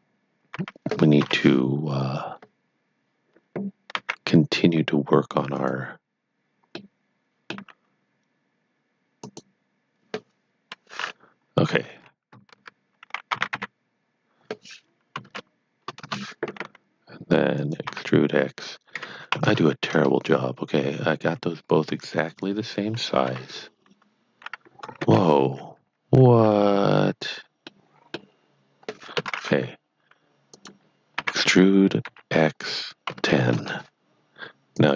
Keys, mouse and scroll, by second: 1.2 KP_7, 3.8 e, 5.5 click, 6.7 middle click, 9.2 click, 12.6 ctrl+z, 13.1-14.0 typing, 15.1 KP_1, 15.3 KP_0, 15.9 KP_Enter, 17.5 click, 17.8 e, 18.9 KP_Subtract, 19.3 KP_1, 19.9 Return, 22.2 click, 23.2 KP_7, 25.3 ctrl+z, 25.8 ctrl+z, 27.6 middle click, 29.1 KP_1, 30.5 click, 31.2-32.1 typing, 33.1 KP_1, 33.6 KP_Enter, 34.7 click.